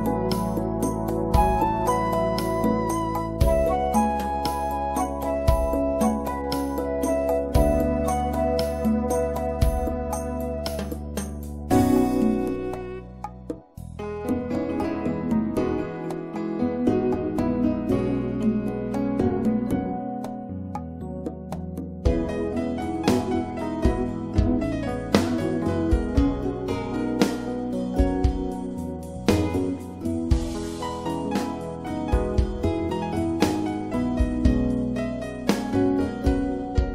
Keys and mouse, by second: 2.9-4.3 middle drag, 8.7-10.6 drag, 10.6 middle click, 10.8-16.8 drag, 17.0 middle click, 17.1 click, 17.2 middle click, 17.5 click, 18.1 click, 21.7 middle click, 22.6 middle click, 23.5-29.3 drag.